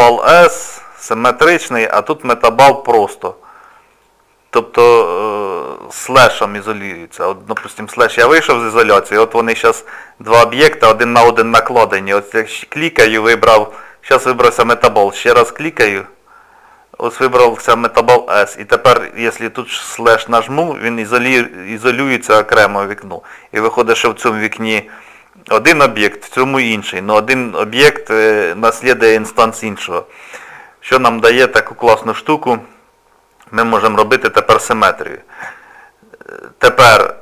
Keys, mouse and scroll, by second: 1.8 click, 3.9 click, 7.6 KP_Divide, 8.9-10.6 scroll up 4, 12.3 click, 15.2 click, 20.1 KP_Divide, 21.6-23.1 scroll down 2, 24.1 middle click, 26.2 middle click, 31.0 shift+middle click.